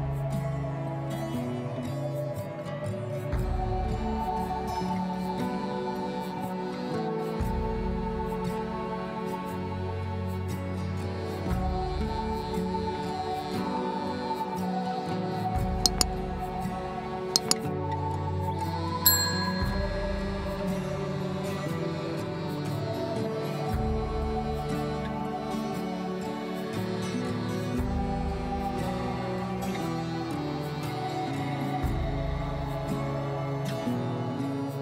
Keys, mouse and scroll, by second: 1.0 r, 5.9 shift+a, 10.2 click, 11.7 scroll up 3, 12.0-13.6 shift+middle drag, 13.6-15.1 shift+drag, 27.4 scroll up 2, 30.0 Tab, 31.3 click, 31.8 Tab, 33.5-34.8 right drag.